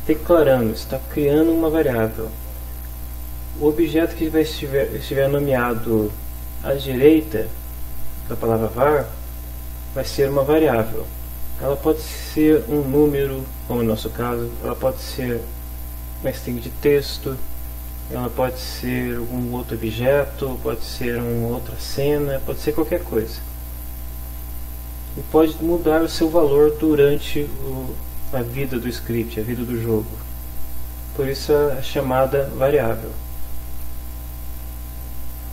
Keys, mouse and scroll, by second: 6.3 click, 14.9 click, 15.7-16.7 drag, 17.9 click, 35.4 click.